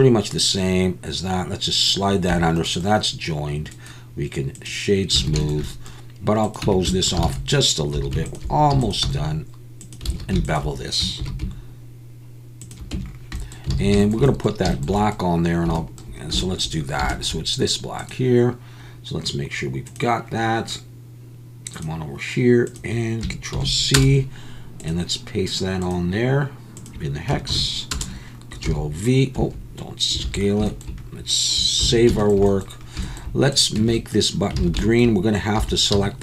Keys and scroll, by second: 2.3 Tab, 5.3 alt+a, 6.6 Tab, 7.2 alt+a, 8.0 2, 8.8 e, 9.0 s, 10.2 alt+a, 11.2 ctrl+b, 12.9 Tab, 13.7 alt+a, 28.7 s, 29.4 Escape, 30.3 alt+a, 31.8 ctrl+s, 33.8 Tab, 34.6 alt+a, 35.6 3, 35.9 c.